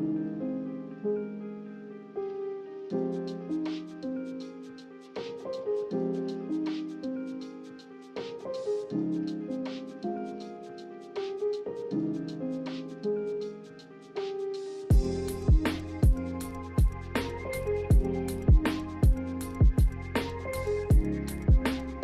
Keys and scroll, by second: 0.0 a, 0.7 ctrl+c, 0.9 ctrl+v, 2.4 a, 15.2 a, 16.6 m, 20.7 b.